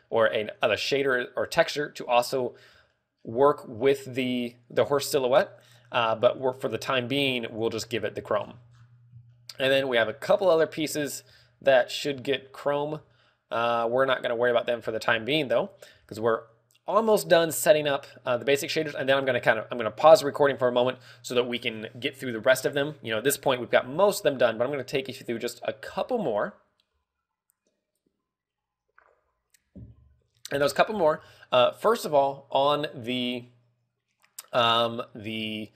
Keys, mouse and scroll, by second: 3.4 shift+middle click, 3.9 scroll up 3, 5.9 shift+middle click, 6.9 click, 8.9-10.5 scroll down 7, 9.8 shift+middle click, 10.7 shift+middle click, 11.2 scroll down 1, 11.5 shift+middle click, 11.9-12.2 scroll up 2, 12.7 scroll up 1, 12.8 shift+middle click, 13.4 scroll down 1, 13.6 shift+middle click, 14.6 shift+middle click, 15.4 scroll up 2, 15.8 shift+middle click, 16.4 ctrl+w, 17.7 scroll down 2, 18.3 shift+middle click, 18.8-19.3 scroll down 2, 19.2 scroll up 2, 20.6 scroll up 1.